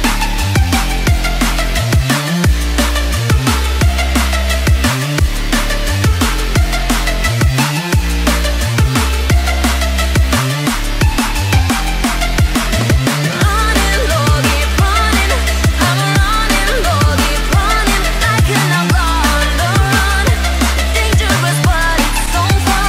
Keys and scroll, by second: 15.5 ctrl+z.